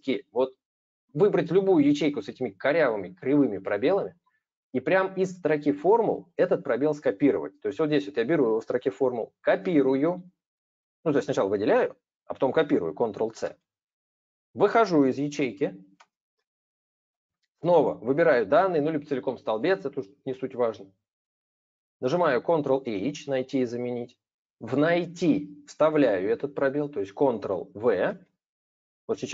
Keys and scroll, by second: 13.1 ctrl+c, 22.5 ctrl+h, 27.8 ctrl+v.